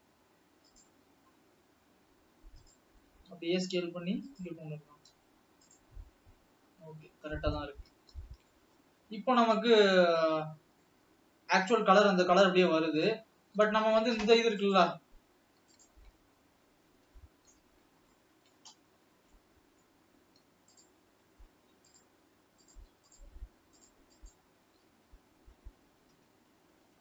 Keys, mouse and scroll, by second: 1.1 s, 3.5 g, 8.6 scroll down 1, 8.9 middle click, 9.7 scroll up 2, 10.4 alt+a, 10.7 Tab, 11.0-13.9 middle drag, 13.9 Tab, 14.7 click, 17.0 KP_7, 18.3 shift+middle click, 18.7-19.4 scroll up 6, 19.4-21.0 middle drag, 21.0 shift+click, 22.2 shift+click, 22.9 shift+click, 23.4 shift+click, 24.0 shift+click, 24.4 shift+click.